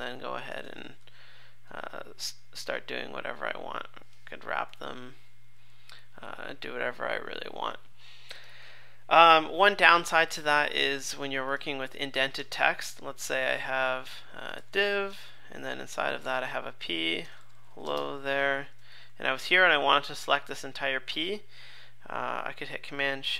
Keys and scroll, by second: 1.7 super+z, 4.7 ctrl+shift+w, 12.4 Return, 15.1 Return, 15.8 super+z, 19.0 super+Right.